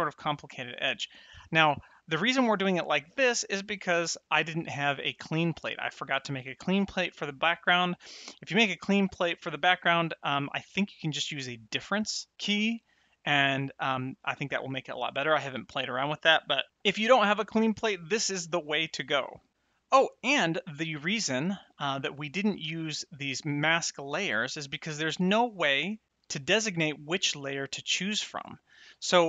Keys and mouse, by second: 20.5 ctrl+shift+click, 22.5 n, 28.5 middle click.